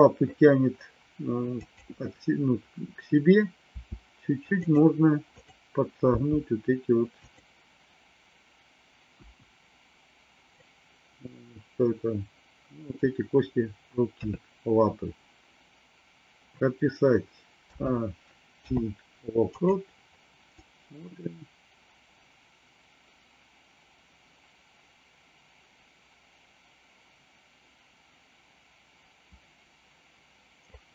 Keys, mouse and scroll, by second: 1.6 click, 3.6 r, 5.2 click, 6.1 r, 9.2 KP_1, 10.5-12.9 middle drag, 14.2 KP_3, 17.6 a, 18.5 i, 20.5-30.9 drag.